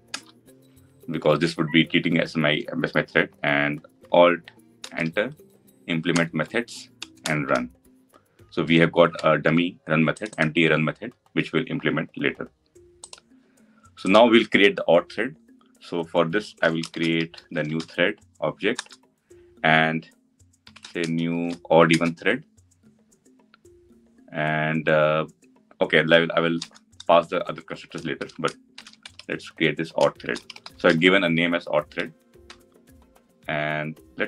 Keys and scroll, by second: 4.7 alt+Return, 18.6 Return, 24.5 Return.